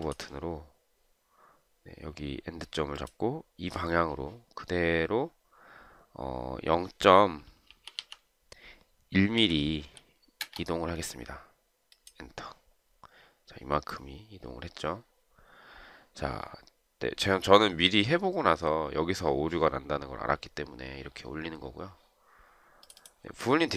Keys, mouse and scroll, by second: 7.7-8.6 typing, 9.7 1, 10.5 Return.